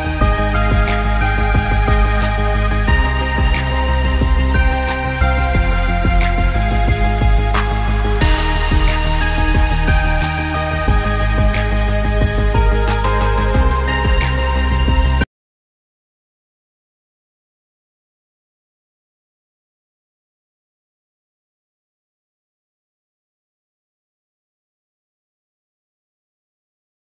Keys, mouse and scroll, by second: 2.0 shift+Num_Lock, 3.2 click, 6.6-6.9 alt+scroll up 2, 6.9 space, 7.0 click, 7.3 space, 8.4 click, 9.6 Return, 11.1 click, 12.4 shift+Up, 13.2 shift+Right, 14.7 click, 18.3 alt+Num_Lock, 19.2 alt+scroll up 1, 19.8 space, 19.9 click, 20.2 space.